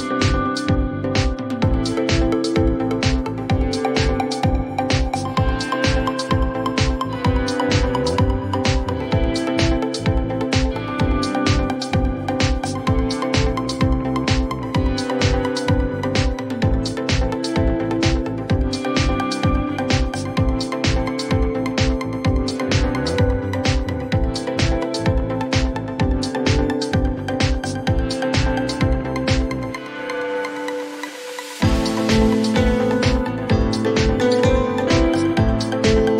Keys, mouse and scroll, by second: 0.4-0.9 typing, 3.1 click, 3.9 right click, 5.7 click, 7.6-9.6 typing, 10.2 Return, 12.9 click, 16.6 click, 18.0-21.9 typing, 18.3-20.0 drag, 24.2 click, 24.4 click, 27.5 click, 28.1-29.2 typing, 29.9 Return, 33.2 click, 33.8-36.1 typing, 34.5 click, 35.4 Return, 35.7 click, 35.9 click.